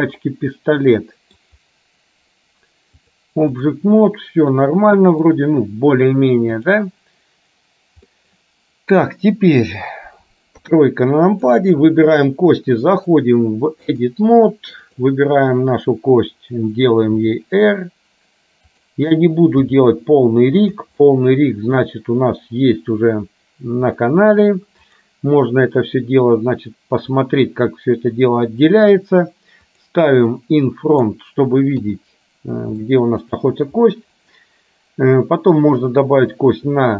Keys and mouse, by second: 3.2 click, 4.6 middle click, 8.1 middle click, 10.6 KP_3, 11.5 click, 13.1-14.2 drag, 14.9 click, 17.2 r, 19.7 g, 21.0 middle click, 25.0 click, 29.7 click, 30.5 middle click, 32.0 KP_3, 32.9 shift+middle click.